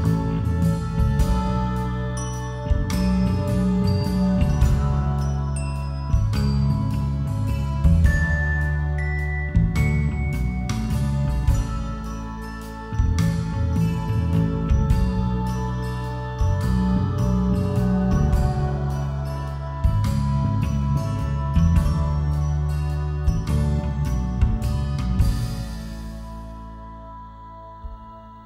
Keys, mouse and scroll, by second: 18.6-20.3 drag.